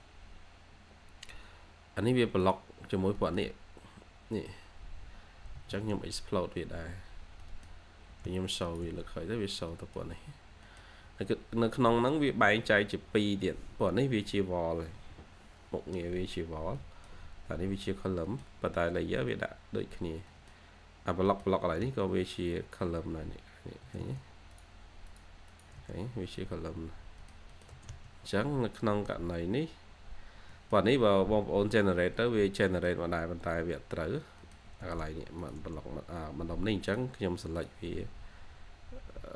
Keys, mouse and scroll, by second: 0.9 scroll, 1.0 scroll up 1, 1.2-1.9 scroll, 2.8-3.5 scroll down 2, 3.1 middle click, 3.5 scroll up 1, 3.6-4.7 scroll down 1, 6.3 scroll, 6.3 scroll up 1, 6.6 x, 6.7 scroll, 6.7-7.0 scroll up 1, 7.0 x, 7.3 middle click, 8.0 1, 9.0 scroll, 9.0 scroll down 1, 9.2 scroll up 1, 9.4 scroll down 1, 9.6 middle click, 10.2-11.1 scroll down 2, 10.6 middle click, 11.1 scroll up 1, 15.5-16.5 scroll up 1, 16.7 middle click, 17.6 Escape, 17.8-18.2 scroll down 1, 18.2 middle click, 18.7 scroll up 1, 19.5-20.2 scroll down 1, 20.2 middle click, 20.8-21.2 scroll up 1, 21.2 middle click, 21.5 typing, 22.8 scroll up 1, 23.1-24.4 typing, 23.4-23.7 scroll up 1, 25.4 double click, 25.7 space, 25.9-26.5 scroll down 1, 26.5 scroll up 1, 26.6-27.1 scroll down 1, 27.1 middle click, 27.6 typing, 29.0-29.7 scroll up 2, 29.3 2, 29.7 2, 30.4 middle click, 30.6-31.1 scroll down 1, 31.1-32.1 scroll up 1, 32.6 middle click, 34.1 scroll down 1, 34.3 middle click, 34.6 1.